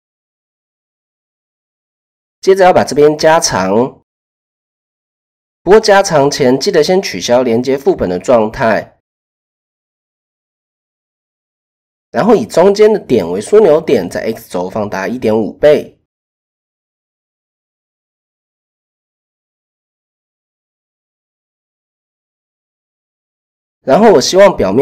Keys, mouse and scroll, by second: 0.1 Tab, 1.1-1.5 shift+drag, 4.1 click, 5.4 click, 6.5 click, 8.2 Tab, 9.2 shift+click, 10.7 click, 11.1 click, 14.2 s, 16.8-18.1 drag, 19.0 Tab, 20.5 click, 21.0-21.5 shift+middle drag, 23.4 click, 23.9 Tab, 24.5 a.